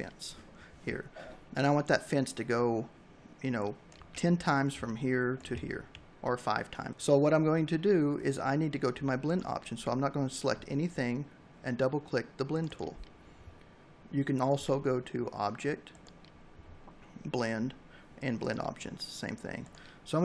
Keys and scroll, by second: 4.6 v.